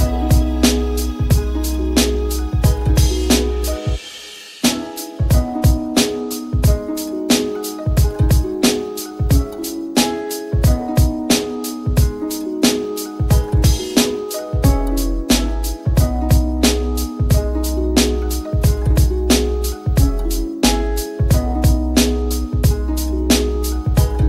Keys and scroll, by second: 20.6 e.